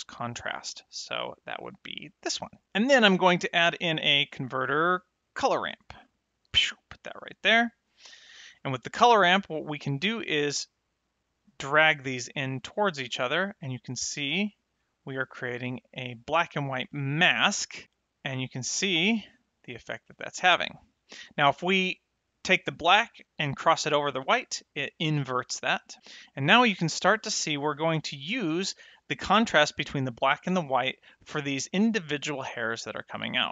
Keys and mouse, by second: 0.4 ctrl+shift+click, 0.8 ctrl+shift+click, 1.1 ctrl+shift+click, 1.5 ctrl+shift+click, 3.4 shift+a, 5.2 click, 6.3 click, 9.5 middle click, 11.4 click, 13.0 click, 17.0 click, 18.1 click, 19.7 click, 22.5 click, 26.7 middle click, 30.7 middle click, 32.7 middle click.